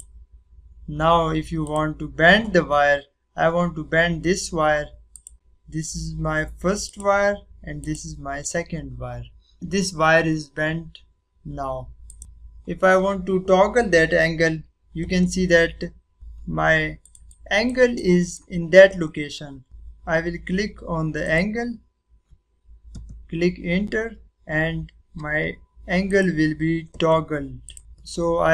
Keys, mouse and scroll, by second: 1.0 click, 5.1 click, 6.8 click, 12.0 click, 15.4-16.1 scroll up 1, 16.1 scroll down 1, 17.0-19.6 drag, 22.0 click, 22.9 Return, 26.0 click.